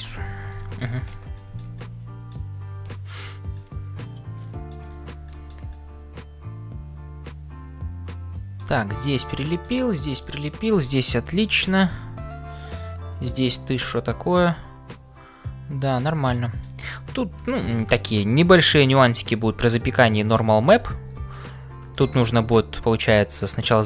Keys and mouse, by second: 0.6 ctrl+s, 1.3 shift+middle click, 1.8 middle click, 2.9 shift+middle click, 3.6-4.9 middle drag, 5.3 middle click, 5.4 shift+c, 5.7-8.7 middle drag, 9.2 middle click, 11.3 KP_Decimal, 12.6-16.6 middle drag, 17.5 shift+middle click, 17.9 middle click, 19.9 middle click, 22.0 shift+middle click.